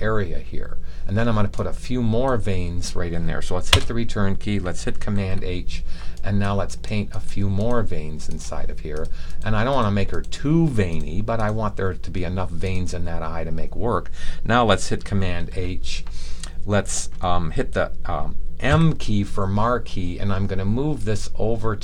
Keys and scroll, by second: 5.1 h, 15.2 super+h, 18.6 m.